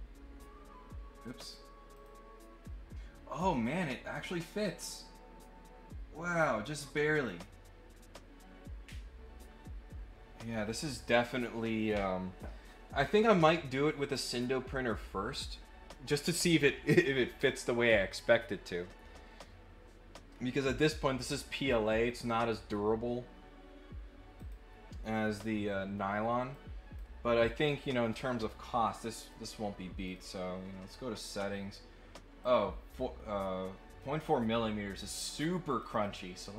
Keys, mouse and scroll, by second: 1.4 click, 1.9 click, 3.7 click, 4.8-10.3 right drag, 10.4-24.3 right drag, 24.3 click, 26.5 click, 28.4 click, 29.2 click, 30.0 click, 32.4-34.0 drag, 35.1 click, 35.4 click, 35.7 click, 35.9 click.